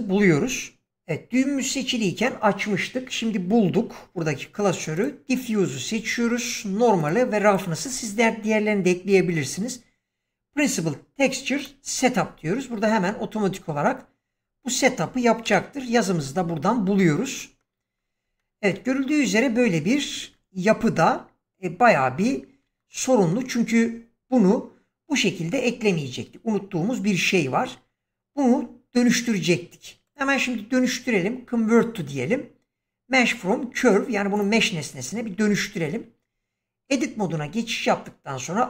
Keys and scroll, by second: 35.4 Tab, 37.3 a.